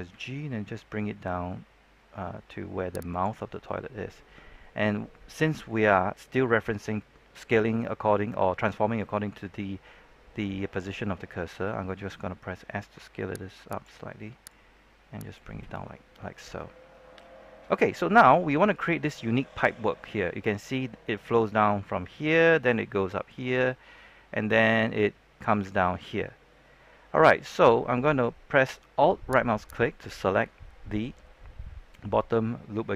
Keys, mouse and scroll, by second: 0.0 g, 3.0 click, 12.5 s, 13.6-16.2 drag, 29.6 alt+right click.